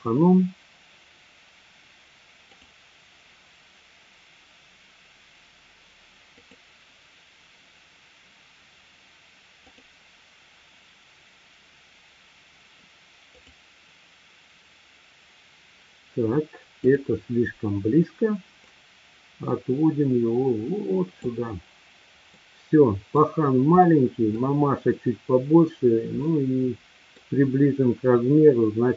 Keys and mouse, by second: 0.9-2.7 drag, 8.1-11.9 drag, 15.1-17.1 drag, 18.7-21.3 drag, 22.4-23.1 middle drag, 23.9-24.4 middle drag, 26.3 middle click.